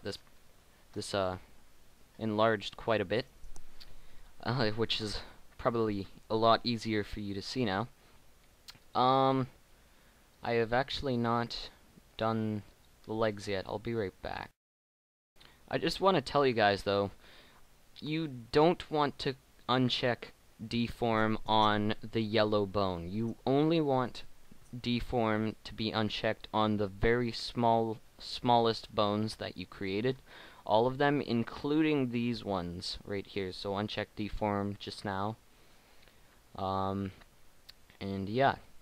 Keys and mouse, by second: 7.3 middle click, 8.8 right click, 14.0 middle click, 14.4 middle click, 23.3 middle click, 23.8-28.6 right drag, 30.1-33.4 right drag, 36.2-38.4 middle drag.